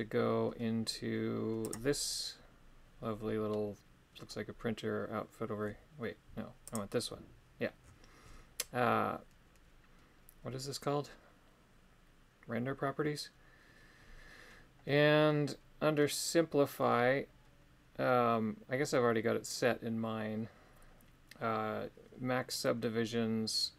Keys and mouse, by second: 1.6 click.